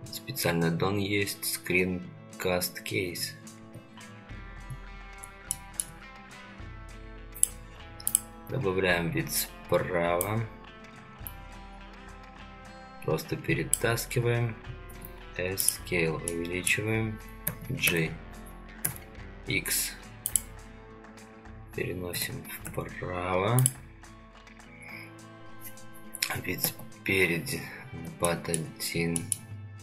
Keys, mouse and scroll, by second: 0.4 n, 1.3 click, 3.6 n, 5.5 shift+middle click, 15.0 s, 16.3-16.7 middle drag, 17.4 g, 22.1 g, 26.6 KP_1, 27.8 scroll down 2, 28.3-28.6 shift+middle drag, 29.2 shift+middle click.